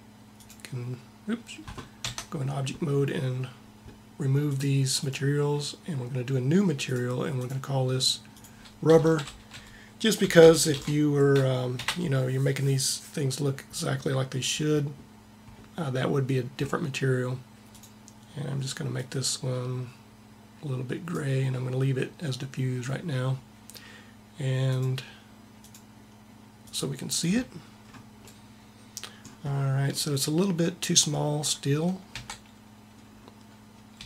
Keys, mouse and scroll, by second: 2.0 Tab, 10.3 b, 32.2 Tab, 33.9 s.